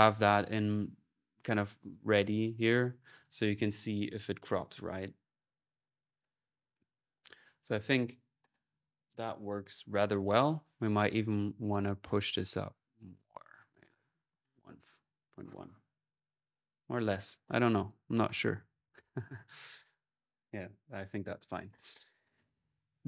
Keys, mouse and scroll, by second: 0.3 click, 1.7 click, 7.2 scroll, 10.9 click, 12.4 click, 16.6-18.0 drag, 21.8 middle click, 22.9 click.